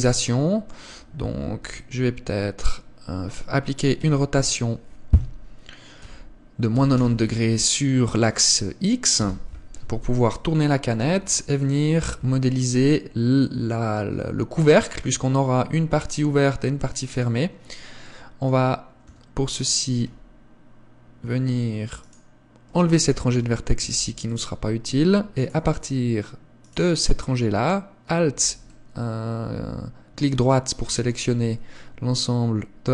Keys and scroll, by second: 1.6 KP_1, 4.2 r, 12.4 Tab, 19.2 a, 24.0 x.